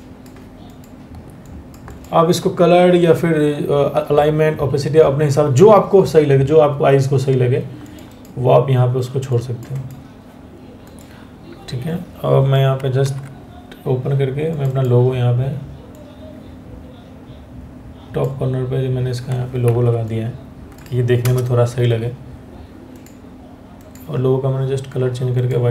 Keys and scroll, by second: 12.6 ctrl+o, 19.2 ctrl+t, 20.8 Return, 25.3 Return.